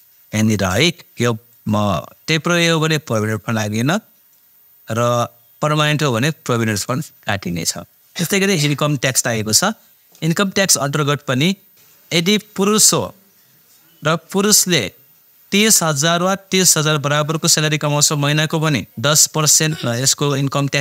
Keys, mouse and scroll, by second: 1.5-4.8 drag, 5.7 click, 10.9 click.